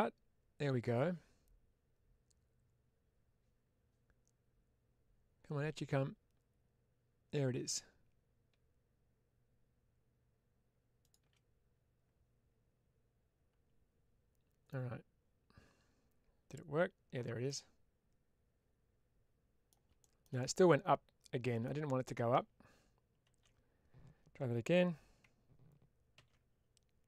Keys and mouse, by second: 17.3-19.5 middle drag, 20.3-21.5 middle drag.